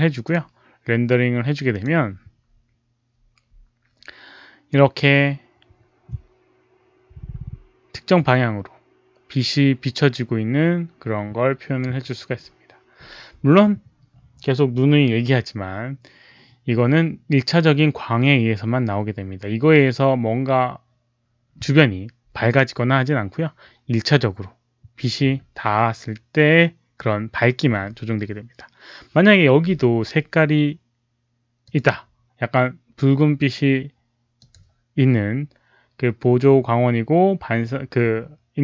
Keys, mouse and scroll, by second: 1.6 click, 8.1 click, 31.6 click, 34.3 click.